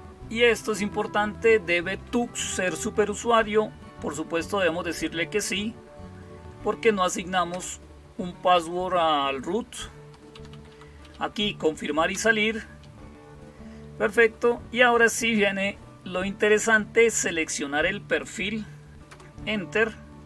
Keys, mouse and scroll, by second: 7.3 Return, 10.2 Down, 10.3 Down, 10.5 Down, 10.8 Up, 11.9 Return, 18.9 Return.